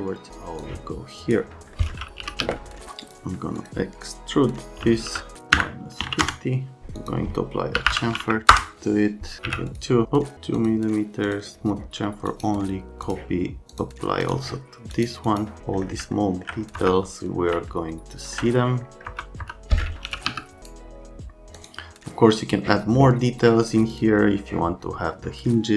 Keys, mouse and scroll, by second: 0.6 click, 1.7 right click, 1.9-2.9 typing, 2.7 right click, 3.0 click, 3.6 click, 4.6-6.1 typing, 5.5 KP_Subtract, 6.2 KP_Enter, 6.9 click, 7.5-8.4 typing, 8.5 Return, 9.4 1, 9.7 click, 10.5 click, 11.2 click, 12.3 right click, 13.0 click, 13.7 click, 14.2 click, 14.9-15.3 scroll up 4, 15.7 middle click, 16.1 alt+middle click, 16.8 F3, 19.1 F3, 19.4 F3, 19.8-20.8 typing, 20.6 right click, 21.5 middle click, 23.9 middle click.